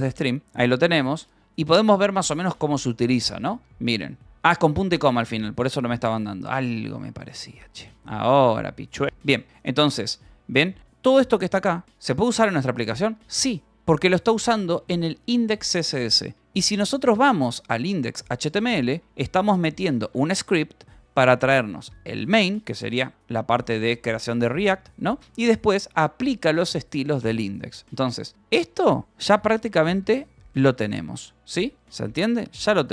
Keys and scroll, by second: 0.0-3.5 typing, 5.7 ctrl+k, 5.8 Return, 6.3-9.0 typing, 9.8 ctrl+j, 10.2 k, 10.7 j, 12.6 j, 13.5 g, 14.1 shift+;, 16.8-20.5 typing, 21.1 Escape, 24.1-26.0 typing, 28.9-32.9 typing, 31.1 Escape, 31.9 Escape.